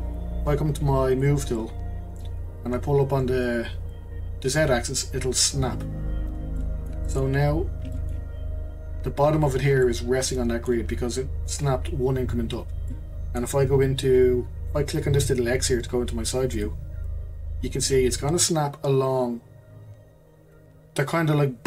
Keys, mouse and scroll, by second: 1.1 click, 1.6-3.9 middle drag, 3.9 click, 6.6-7.4 middle drag, 7.4-7.9 scroll up 4, 7.9-12.6 shift+middle drag, 12.6-12.9 scroll down 2, 12.9-16.0 middle drag, 16.6 click, 17.2-17.6 scroll up 1, 17.6-20.6 shift+middle drag.